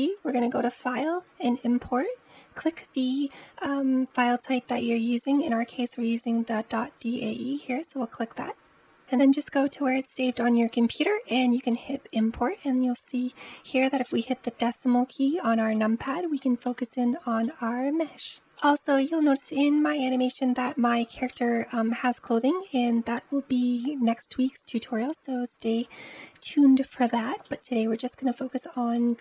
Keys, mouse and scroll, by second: 0.0-3.0 drag, 13.6 KP_Decimal, 15.5-16.5 middle drag, 16.5-17.3 scroll up 2, 17.3-18.3 scroll down 1, 18.4-23.8 shift+middle drag, 26.9-28.2 middle drag, 28.2-28.8 scroll up 2, 28.8-29.2 shift+middle drag.